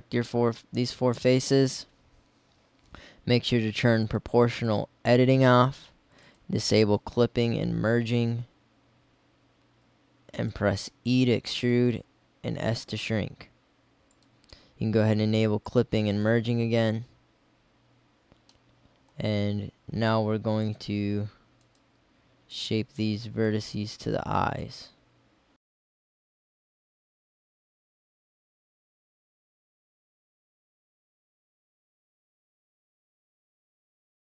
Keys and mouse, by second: 4.1-6.1 drag, 6.1 middle click, 6.2-8.3 drag, 8.3 s, 10.3 click, 10.9 e, 11.9 s, 31.7 middle click, 34.0 middle click.